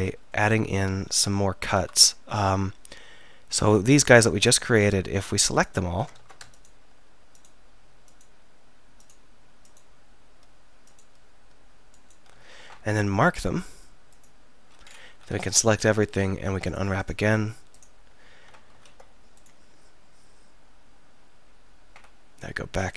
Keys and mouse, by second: 6.2 ctrl+z, 15.1 a, 15.3 a.